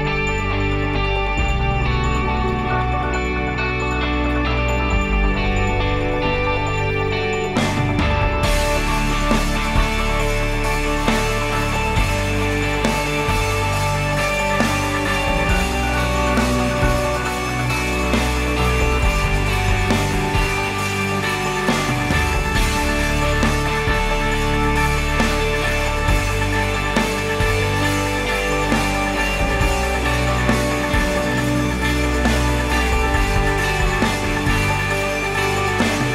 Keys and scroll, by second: 15.6 ctrl+s, 18.6 ctrl+s, 24.3-26.7 typing, 26.8 Return.